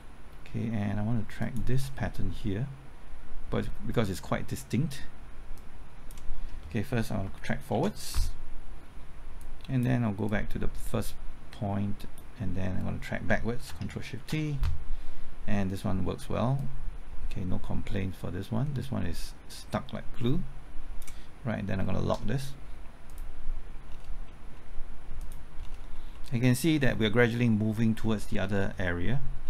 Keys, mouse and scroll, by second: 1.4 ctrl+click, 5.6 click, 7.7 ctrl+t, 9.4 click, 11.1-13.1 drag, 14.6 ctrl+shift+t, 16.6-23.9 drag, 23.9-24.3 scroll down 1, 24.3 middle click, 25.2 click, 25.6 scroll down 1, 26.1 middle click, 28.3 scroll down 1, 28.8 middle click, 29.4 scroll up 1.